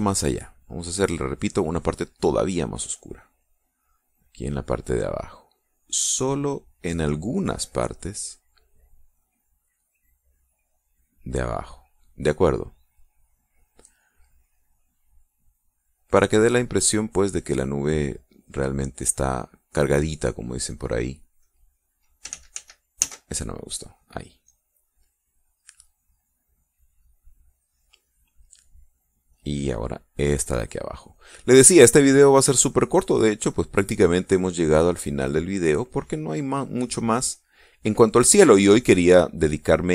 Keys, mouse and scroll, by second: 0.9 click, 3.8-6.5 drag, 6.6-8.2 drag, 8.4-11.4 drag, 11.6-14.5 drag, 16.4 click, 16.8 click, 17.9 middle click, 18.1-20.0 drag, 20.1 click, 21.4 click, 22.1 click, 23.0 ctrl+z, 25.2-26.8 drag, 27.0-28.4 drag, 29.8-31.6 drag, 32.2 click, 33.0-35.0 drag, 35.1-36.6 drag, 37.7 click, 38.6 click.